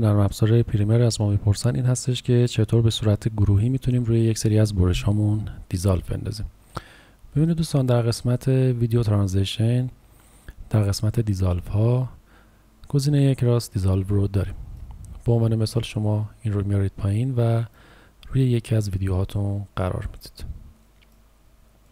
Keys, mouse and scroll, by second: 7.5 click, 20.0 space, 20.8 click.